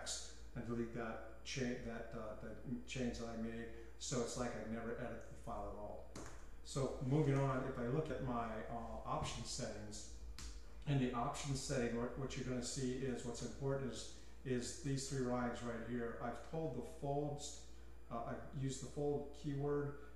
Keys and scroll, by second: 6.3-7.4 typing, 9.1-10.4 typing, 12.3-15.4 typing.